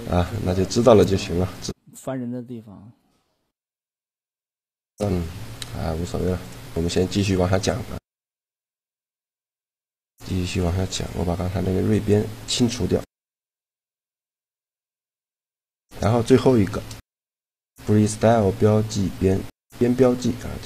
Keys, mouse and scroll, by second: 0.1 middle click, 0.9 click, 1.3 shift+g, 1.9 right click, 4.0 a, 5.4 Tab, 6.3 click, 8.6 Tab, 9.9 a, 11.0 ctrl+e, 13.5 a, 16.3 shift+g.